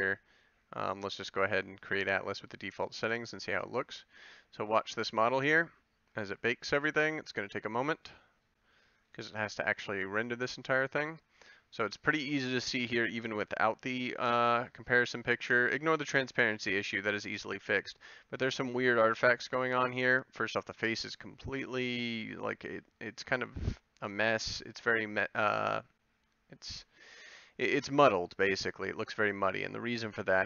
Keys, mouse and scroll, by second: 2.8-9.8 drag, 13.7 h, 29.1 click.